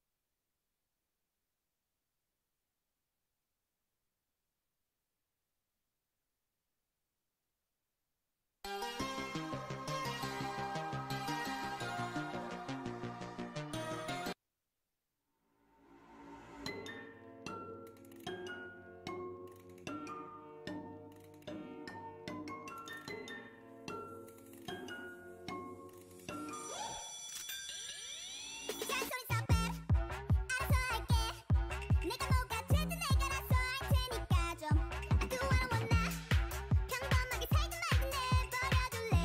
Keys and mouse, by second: 23.9-25.2 middle drag, 25.0 Tab, 26.2 ctrl+Tab, 27.4 ctrl+Tab, 28.6 c, 29.9 click, 30.1 ctrl+Tab, 30.2 click, 30.7 c, 36.8 click, 37.6 c.